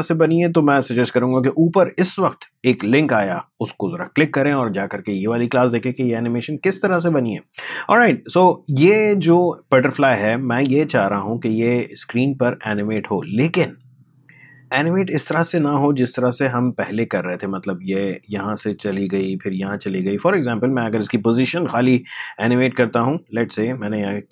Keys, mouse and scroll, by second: 8.4-13.5 drag, 21.6 p, 22.8 click.